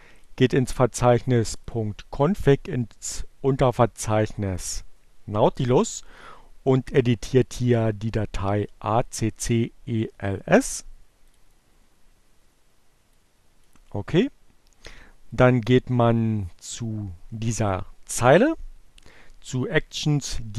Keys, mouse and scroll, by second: 0.3 click, 1.0 click, 4.7 click, 6.3 click, 9.0 right click, 11.3 click, 13.3 click, 14.8-17.3 drag.